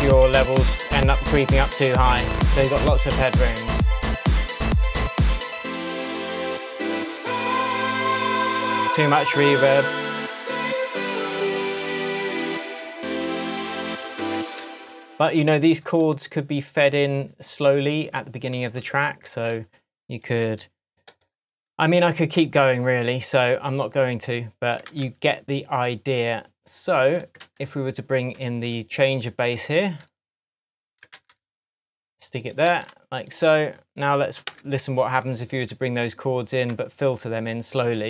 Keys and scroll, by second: 1.2 Tab, 14.4 space, 21.1 super+i, 24.9 super+c, 27.5 super+v, 31.2 super+c, 32.7 super+v, 34.5 BackSpace.